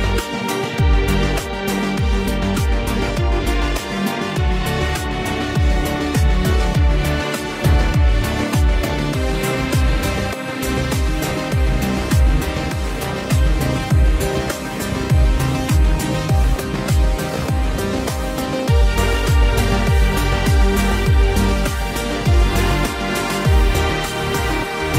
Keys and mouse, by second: 0.2 right click, 0.6 ctrl+z, 0.8 ctrl+z, 2.1 ctrl+z, 2.7 ctrl+z, 2.7 right click, 2.8 ctrl+z, 3.0 ctrl+z, 7.0 ctrl+z, 7.3 ctrl+z, 7.6 ctrl+z, 8.0 ctrl+z, 8.1 ctrl+z, 8.6 ctrl+z, 8.8 ctrl+z, 10.2 ctrl+z, 10.5 ctrl+z, 11.8 ctrl+z, 12.0 ctrl+z, 12.5 ctrl+z, 13.1 ctrl+z, 13.8 ctrl+z, 14.9 ctrl+z, 15.7 right click, 16.0 ctrl+z, 16.3 ctrl+z, 16.4 ctrl+z, 16.6 ctrl+z, 18.3 right click, 19.0 ctrl+z, 20.7 ctrl+z, 21.1 ctrl+z, 21.4 ctrl+z, 21.8 ctrl+z, 21.9 ctrl+z, 22.2 ctrl+z, 22.8 ctrl+z, 23.2 ctrl+z.